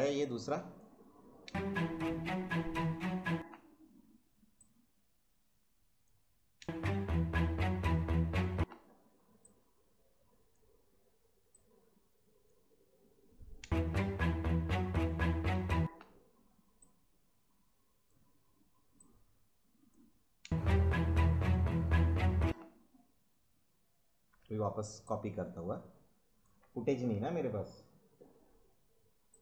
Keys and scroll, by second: 1.4 space, 3.3 space, 6.6 space, 8.5 space, 13.6 space, 15.7 space, 20.4 space, 22.4 space.